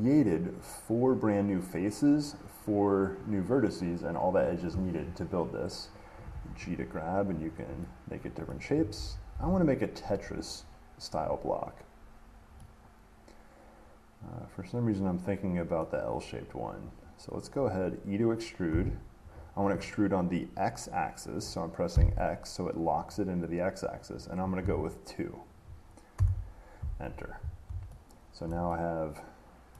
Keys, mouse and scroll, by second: 6.4 g, 7.6 click, 8.7 middle click, 9.2 ctrl+z, 9.5 ctrl+z, 10.9 middle click, 11.1 middle click, 16.0 middle click, 18.0 middle click, 18.9 e, 22.1 x, 24.8 2, 26.4 Return, 28.7-29.7 middle drag.